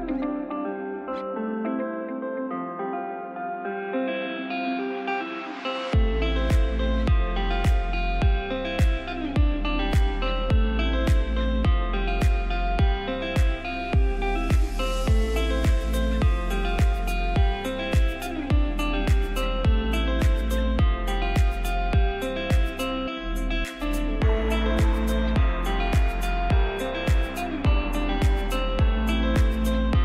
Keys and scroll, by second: 7.0 shift+Page_Down, 7.2 ctrl+Page_Up, 14.9 g, 21.3 shift+Page_Down.